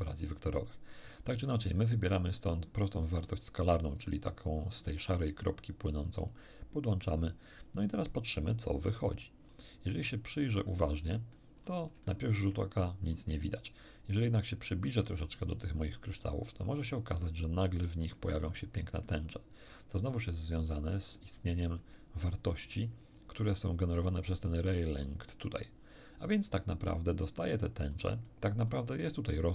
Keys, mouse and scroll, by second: 2.5-3.5 drag, 3.9-6.5 drag, 8.5-9.7 middle drag, 10.1 middle click, 11.2 middle click, 11.7 middle click, 12.0-13.3 shift+middle drag, 13.7-14.5 shift+middle drag, 15.0 middle click, 15.7 middle click, 16.1-16.5 scroll up 1, 17.3 shift+middle click, 18.1 shift+middle click, 18.7 shift+middle click, 19.8 middle click, 21.1 middle click, 21.9-22.8 shift+middle drag, 26.5-28.1 middle drag, 28.3 middle click.